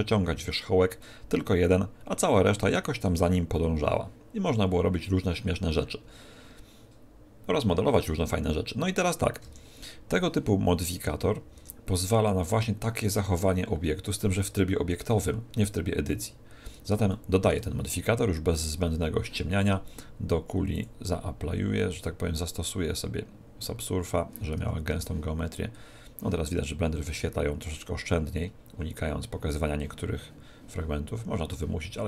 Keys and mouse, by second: 11.6 Tab, 17.1-19.7 middle drag, 20.7-22.7 drag, 24.6 Tab, 24.9 Tab, 28.0-30.3 middle drag.